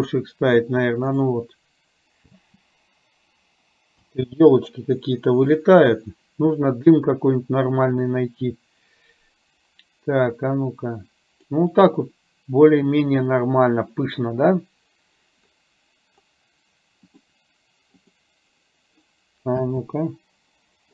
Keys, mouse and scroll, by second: 2.5 space, 4.1 space, 10.4-11.5 drag, 17.3-18.3 drag, 19.6 space.